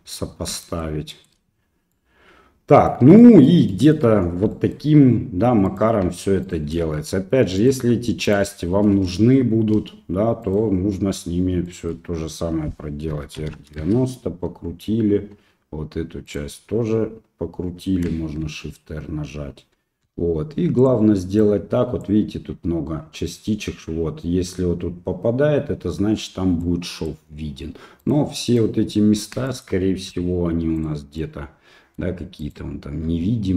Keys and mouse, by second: 0.6 shift+middle click, 1.1 shift+middle click, 1.9 middle click, 3.2 middle click, 3.7 middle click, 4.5 shift+middle click, 5.7 right click, 6.4 shift+right click, 7.6 right click, 8.3 shift+right click, 10.4 right click, 11.6 shift+middle click, 13.1 r, 16.3 right click, 18.4 shift+r, 20.0 g, 21.4 click, 26.8 middle click, 28.0 right click, 28.5 right click, 29.6 shift+middle click, 30.1 g, 31.2 middle click, 32.4 right click, 33.1 g.